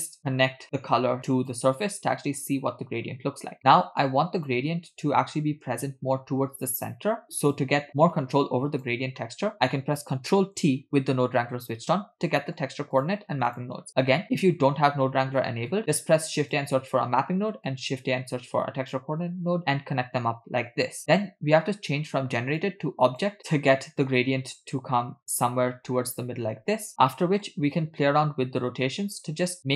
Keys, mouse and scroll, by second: 0.3-1.7 drag, 2.5-3.0 scroll down 3, 3.0-4.0 scroll up 3, 4.0 scroll down 1, 4.1 click, 4.4 click, 7.6-8.9 drag, 9.2 middle click, 10.7 ctrl+t, 12.5 middle click, 13.0 click, 13.5 click, 15.7-16.7 drag, 17.8-19.0 drag, 22.6-23.4 drag, 27.1 middle click.